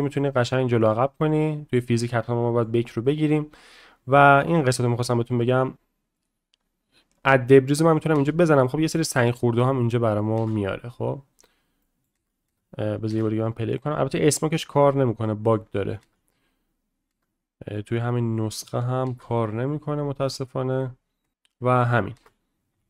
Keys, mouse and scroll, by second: 2.1-2.6 middle drag, 3.1 middle click, 7.3 drag, 8.1 space, 11.4 click, 11.4 space, 11.8 middle click, 16.8 space, 19.5 middle click, 22.7 space, 22.7 a.